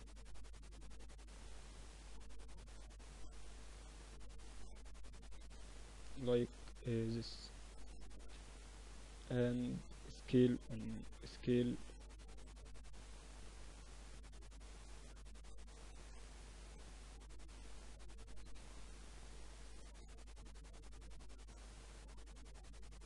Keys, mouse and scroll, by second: 0.5 r, 2.4-4.3 drag, 4.5 z, 4.7-6.2 middle drag, 5.3 z, 5.9 Tab, 6.5 Tab, 7.4 KP_1, 9.7 s, 12.2-14.2 drag, 15.6 s, 16.5 z, 17.5 Tab, 18.3 z, 20.0-21.4 drag, 21.4-23.0 middle drag.